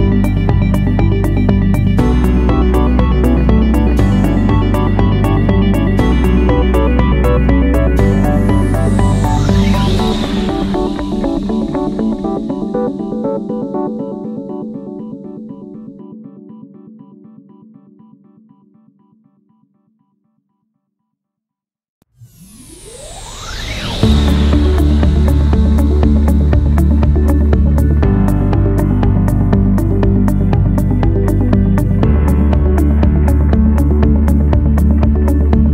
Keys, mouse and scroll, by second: 24.2 1, 24.8 5, 25.2 Return.